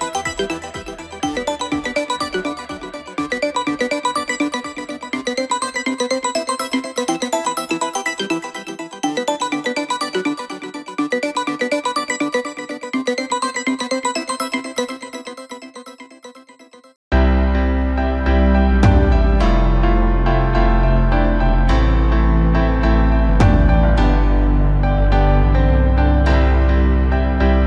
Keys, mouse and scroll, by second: 0.1 shift+click, 0.6 shift+click, 1.1 shift+click, 1.6 shift+click, 2.2 shift+click, 2.8 shift+click, 3.3 shift+click, 4.3 shift+click, 4.8 shift+click, 5.6 ctrl+KP_4, 6.1 KP_4, 6.2 KP_4, 7.9 shift+click, 8.5 shift+click, 9.0 shift+click, 9.6 shift+click, 10.3 shift+click, 10.9 shift+click, 11.4 shift+click, 11.9 scroll down 2, 12.2-13.4 middle drag, 13.4 scroll up 1, 14.4 shift+d, 16.2 p, 18.3 Tab, 19.4 click, 20.4 click, 21.4 KP_Divide, 22.9 KP_1, 23.6-24.0 scroll up 2, 24.0 Tab, 24.5-25.5 scroll up 2, 25.5 a, 25.8 1, 26.3-26.6 scroll up 2, 26.6 scroll down 1, 26.9 middle click.